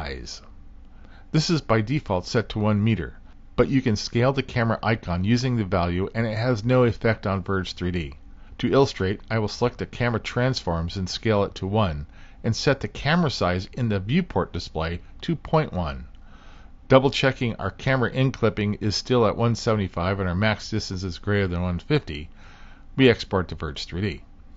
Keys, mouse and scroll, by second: 9.7-12.8 drag, 14.1-15.3 drag, 16.0-20.0 drag, 23.0-23.9 drag.